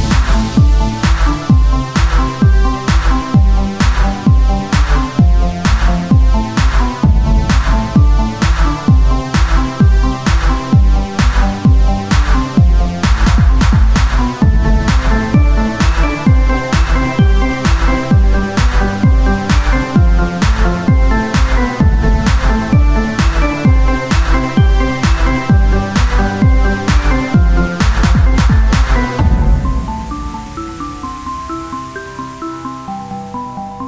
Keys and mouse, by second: 0.1-1.3 drag, 1.3 e, 2.5-4.5 drag, 4.5 Tab, 5.3 z, 9.5 ctrl+Tab, 10.2 x, 11.0 c, 12.0 click, 15.1 right click, 15.7 x, 16.6 z, 16.9 c, 18.1 z, 19.2 click, 20.3 Tab, 24.6 Tab, 28.4-29.8 drag, 29.0 z, 29.8 c, 30.1-31.8 drag, 30.2 z, 33.3 click, 33.6 z.